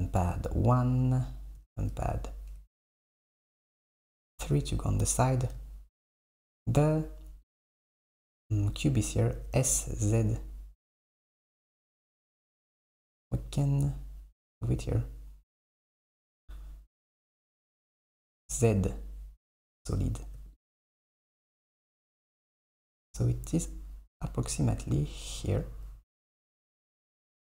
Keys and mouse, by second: 0.0 click, 2.0 KP_3, 7.5 click, 9.4 s, 12.2 g, 20.6 click, 22.6 click, 22.8 g.